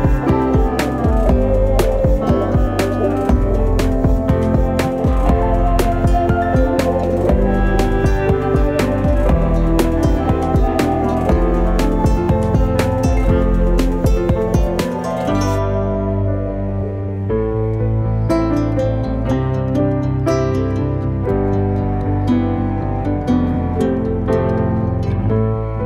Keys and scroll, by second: 9.2 space, 13.2 alt+space, 19.1 ctrl+space, 20.3 alt+space.